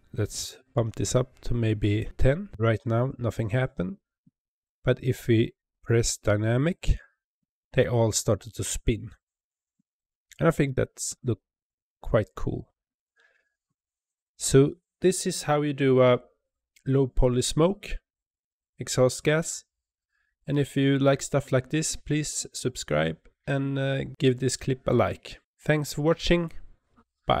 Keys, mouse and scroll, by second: 6.6 click, 10.5 space, 11.1 space.